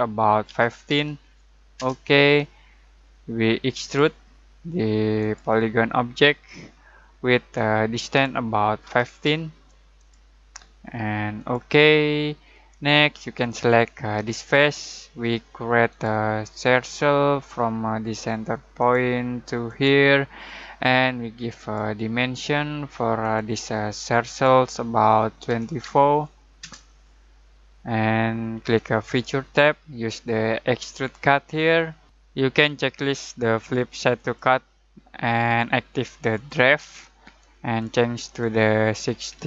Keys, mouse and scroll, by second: 0.4-0.8 typing, 1.7 Return, 3.8 click, 7.5-8.8 drag, 8.8-9.2 typing, 9.9 click, 12.5-14.1 middle drag, 14.1 click, 25.4-25.8 typing, 26.6 Return, 29.0 click, 34.1 click, 39.2-39.4 typing.